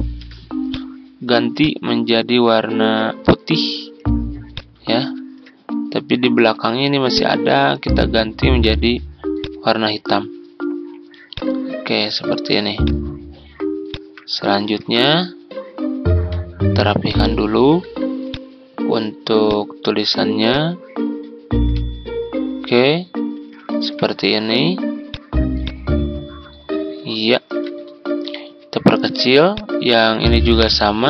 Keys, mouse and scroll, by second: 0.6 click, 4.9 ctrl+scroll up 1, 6.0-8.2 drag, 13.8 shift+click, 14.8 shift+t, 16.1 ctrl+scroll down 1, 17.0 click, 18.2-24.1 drag, 24.3 ctrl+scroll down 1, 25.0 click, 27.5 ctrl+g, 27.9 ctrl+scroll up 1, 29.4 ctrl+click, 30.6-31.0 drag.